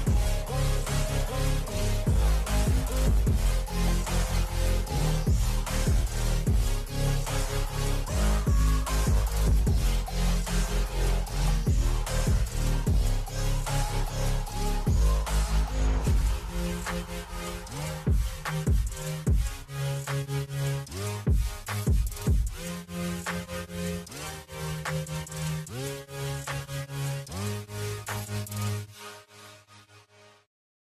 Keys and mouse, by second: 0.5 ctrl+h, 1.8 shift+Down, 2.3 shift+Left, 2.5 shift+Left, 2.8 shift+Up, 3.2 shift+Left, 4.4 Right, 10.9 click, 12.2 click, 15.8 click, 18.9 click, 20.1 Down, 20.2 Down, 20.6 Down, 20.8 Down, 21.3 Left, 21.5 Left, 22.8 Up, 23.6 Right, 24.4 Right, 24.8 Right, 25.2 Right, 25.3 Right, 25.6 Right, 25.9 Right, 26.2 Up, 26.4 Up, 29.5 click.